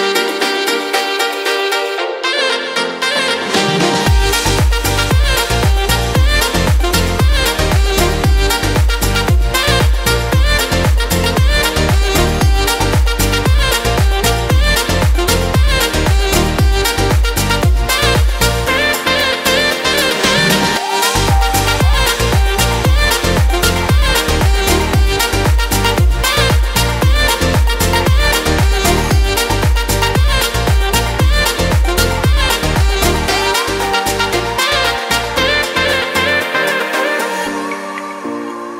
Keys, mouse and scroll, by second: 30.8 alt+w, 35.3 alt+w, 38.3 shift+f.